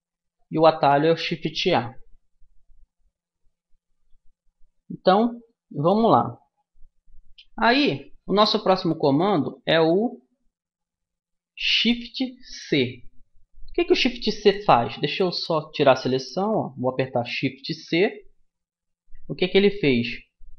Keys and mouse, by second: 7.3-15.2 middle drag, 15.2 a, 18.0 shift+c, 19.4-20.5 middle drag.